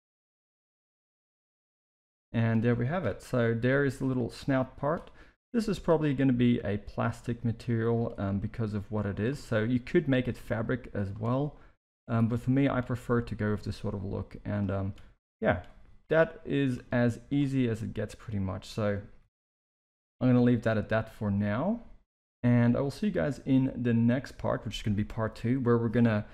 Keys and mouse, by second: 0.0-1.4 typing, 1.7 middle click, 2.9 KP_3, 3.5 z, 4.3 click, 5.3 s, 8.3 g, 9.8 click, 10.6 click, 12.5 click, 12.9 g, 13.9-14.5 drag, 14.9 e, 15.7 s, 16.9 z, 17.7 middle click, 19.2 KP_1, 19.7 Tab, 20.3 alt+a, 22.7-24.6 middle drag.